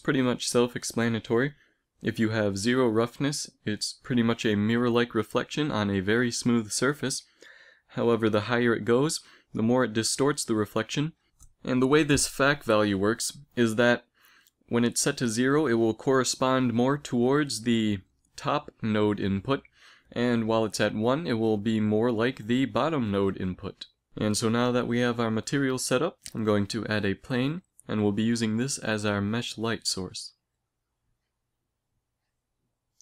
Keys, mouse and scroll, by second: 1.5-3.6 drag, 4.4 middle click, 7.5-9.4 drag, 13.5-15.3 drag, 20.1 middle click, 24.8 shift+a, 27.9 r, 30.0 r, 31.5 g.